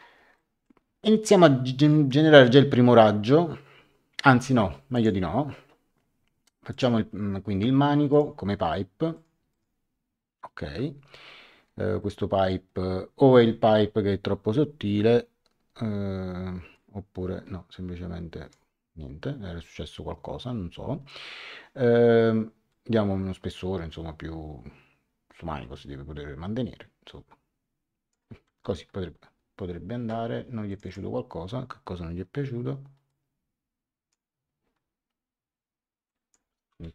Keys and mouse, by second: 0.3 middle click, 4.9 click, 6.7 click, 8.1 click, 9.1 click, 12.0 middle click, 16.7 click, 22.7 click, 28.5 Return, 30.7 click, 33.0 click, 36.0 click.